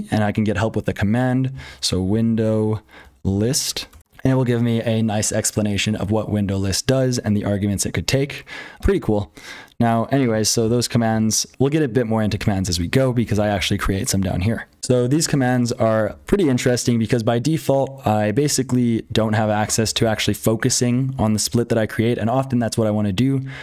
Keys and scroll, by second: 0.0-23.6 typing, 3.9 Return, 14.8 super+h, 14.8 F12.